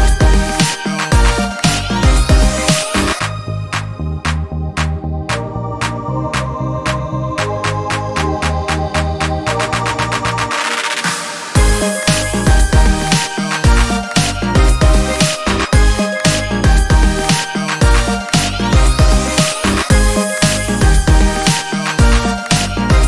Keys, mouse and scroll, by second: 0.4 ctrl+d, 1.3 click, 3.0-5.3 ctrl+drag, 5.6 ctrl+shift+click, 6.6 ctrl+shift+KP_Subtract, 10.3 click, 12.5 ctrl+scroll up 2, 13.0 ctrl+scroll up 2, 13.8 ctrl+d, 14.5-18.5 ctrl+drag, 18.9 ctrl+Up, 20.7 click, 22.1 ctrl+d.